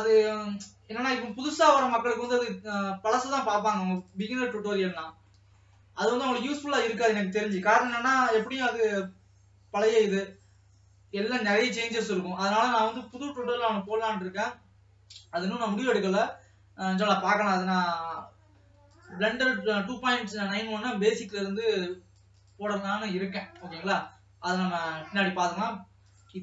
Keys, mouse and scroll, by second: 13.4 scroll down 3, 14.0 ctrl+s, 14.5 scroll up 2, 21.7-26.4 drag.